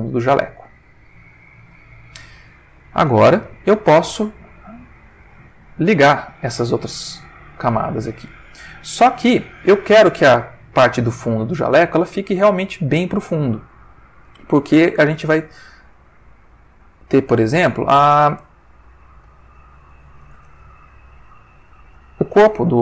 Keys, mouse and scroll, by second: 0.4 click, 3.3 click, 4.3 click, 5.5 ctrl+middle click, 6.5-14.5 ctrl+middle drag, 16.8 click, 19.1 click, 19.9 ctrl+middle click, 20.7 ctrl+shift+middle click.